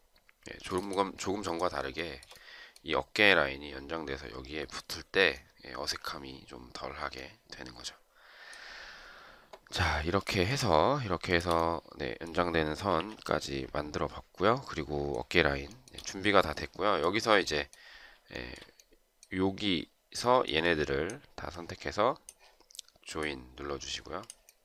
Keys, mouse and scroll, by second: 1.8 shift+right click, 11.1 shift+click, 12.8 Delete, 15.5 shift+right click, 18.2 shift+right click.